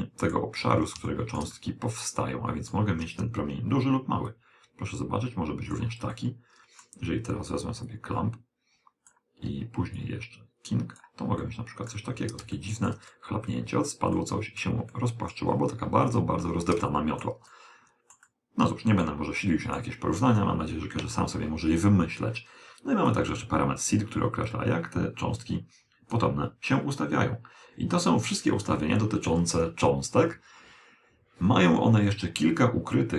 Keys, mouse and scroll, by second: 4.3 click, 6.2-7.9 middle drag, 7.9 click, 10.1 click, 11.5-21.1 middle drag, 23.1 click.